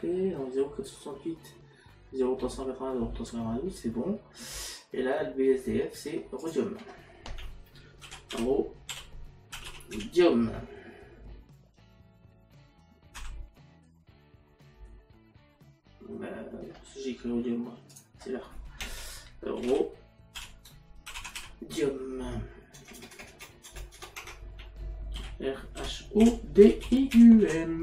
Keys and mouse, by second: 6.4 click, 13.8 m, 17.9 click, 19.7 shift+r, 22.8 BackSpace, 24.6 Caps_Lock, 25.8 h.